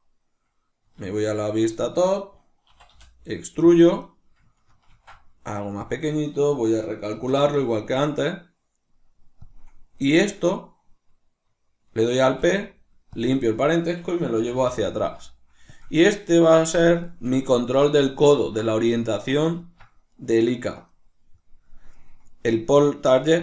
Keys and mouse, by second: 1.0 alt+q, 1.8-3.8 shift+middle drag, 2.7 e, 3.8 click, 4.1 right click, 5.9 click, 13.5 right click, 14.4 g, 15.9 click, 16.2-19.0 middle drag, 19.0 right click, 19.6 Tab, 20.1 right click.